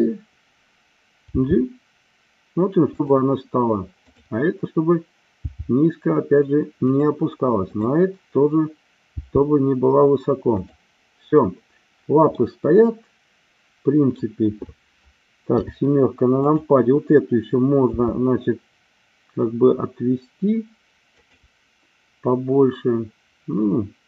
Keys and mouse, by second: 1.3 g, 2.8 click, 4.1 click, 5.4 g, 6.8 click, 7.7 click, 9.1 g, 10.6 click, 12.4-14.2 middle drag, 15.4 KP_7, 16.3-17.3 drag, 17.9 r, 21.2 click.